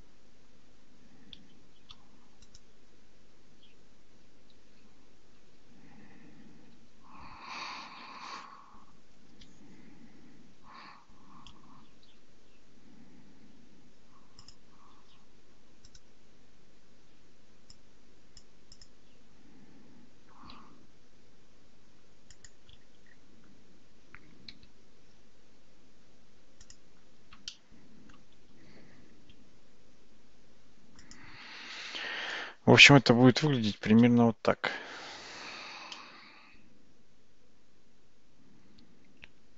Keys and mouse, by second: 1.8 shift+d, 5.4 r, 12.1 g, 15.9-18.9 right drag, 20.6 g, 27.5 shift+middle click, 28.6 g, 34.0 shift+z, 34.6 Tab, 35.0 Tab, 36.0-39.5 middle drag.